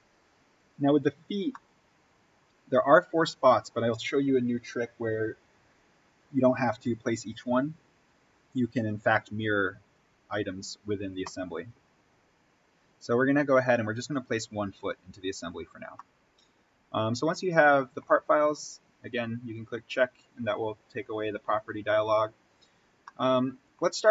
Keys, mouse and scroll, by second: 0.5 click, 1.4-14.0 middle drag, 14.0 click, 15.6-16.0 scroll up 1, 16.0-19.5 middle drag, 19.5 click, 21.7-23.0 scroll up 1, 23.0 middle click, 23.7-24.1 scroll down 1.